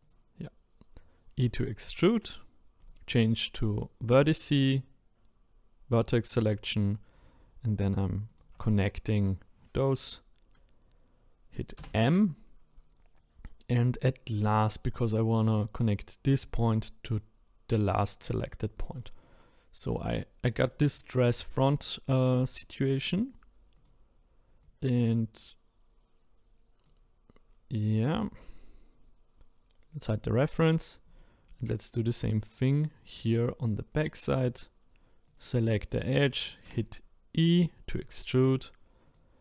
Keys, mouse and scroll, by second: 0.0 click, 2.8 click, 7.1 click, 8.3 shift+click, 11.8 m, 18.5-19.2 scroll down 1, 19.2-20.2 middle drag, 20.2-20.7 scroll down 3, 20.7-22.5 middle drag, 22.5 click, 22.8-23.7 scroll up 3, 23.7 click, 24.6 click, 28.0 click, 30.0 click, 30.7-31.2 scroll up 3, 31.2 shift+middle click, 32.0-34.3 scroll up 1, 34.3 click, 35.2 click, 36.6 e.